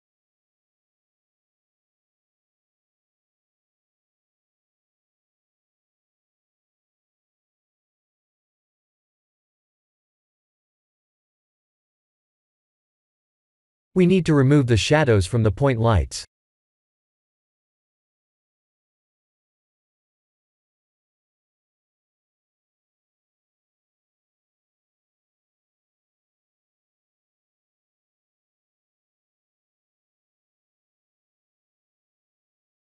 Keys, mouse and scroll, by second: 4.8 middle click, 6.5 middle click, 6.9-7.8 scroll down 1, 7.8 click, 10.3 KP_0, 11.9 click, 27.4 click, 28.8 click, 29.9 click, 30.9 click, 31.4-32.4 scroll down 7, 32.6 click.